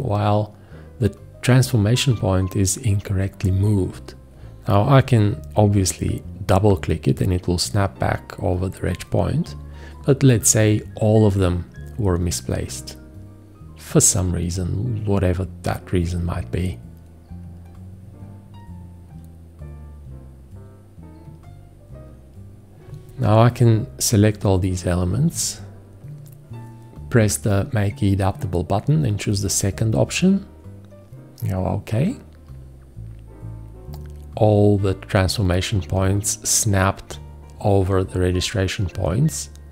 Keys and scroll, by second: 4.9 q.